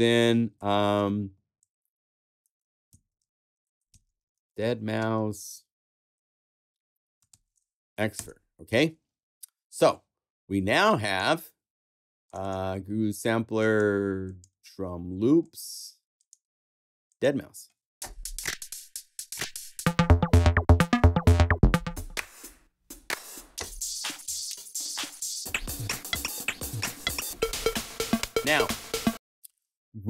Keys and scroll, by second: 0.5 Delete, 1.3 shift+Delete, 1.6-5.0 typing, 6.7-7.7 typing, 8.1 Return.